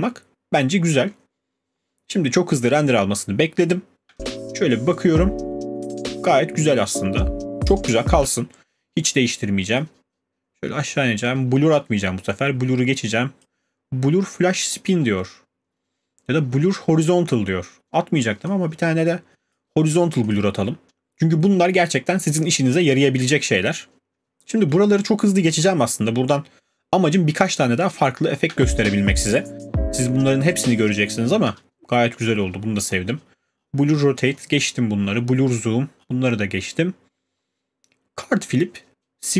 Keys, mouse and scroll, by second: 8.0 scroll, 8.2 space, 13.4 click, 15.7 click, 15.7-16.2 scroll, 19.5 click, 20.3 click, 27.9 click, 28.5 space, 31.5 space, 32.4 scroll down 5, 32.9-36.7 scroll.